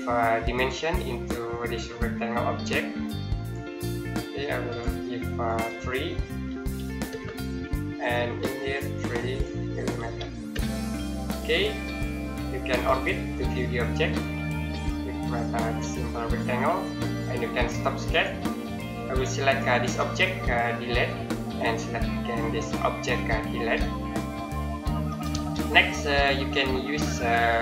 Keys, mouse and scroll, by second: 6.2 click, 6.4 KP_3, 6.9 KP_Enter, 8.5 click, 9.8 KP_3, 10.3 KP_Enter, 11.5 middle click, 12.9 middle click, 14.2 middle click, 14.4 scroll down 1, 14.7-15.3 scroll up 1, 15.7 middle click, 17.9 click, 20.9 Delete, 21.6 click, 23.4 Delete, 24.0 middle click, 25.3 middle click.